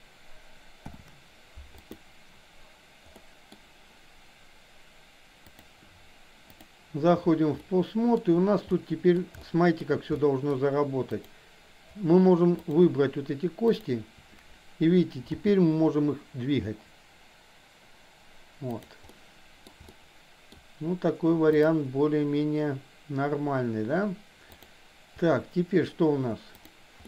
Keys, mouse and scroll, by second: 0.8 ctrl+p, 3.2 middle click, 5.6-6.8 drag, 7.6-8.2 shift+middle drag, 8.7-9.2 middle drag, 9.5-9.8 shift+middle drag, 10.2-10.6 middle drag, 11.1 click, 12.6 shift+click, 13.7 shift+click, 15.5 g, 19.1-19.6 middle drag, 20.0-20.6 shift+middle drag, 24.6 click.